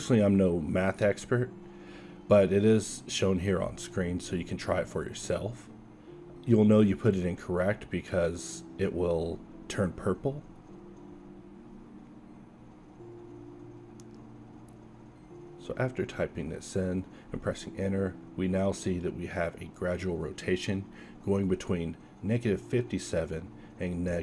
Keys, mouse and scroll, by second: 4.2 BackSpace, 4.6 BackSpace, 17.1 alt+a, 21.9 click, 22.4 a, 23.4-24.0 drag, 24.0 Escape.